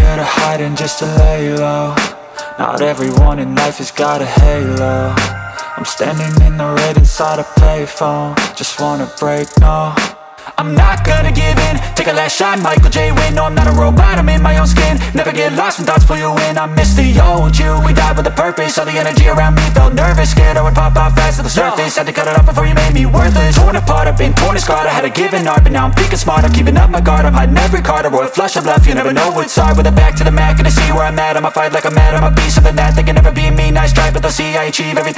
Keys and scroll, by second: 0.8 c, 1.2 Escape, 3.8 Escape, 4.6 F2, 10.5 space, 11.3 c, 11.6 Escape, 16.7 space, 22.2 c, 22.5 Escape, 23.3 F3, 23.8 F2.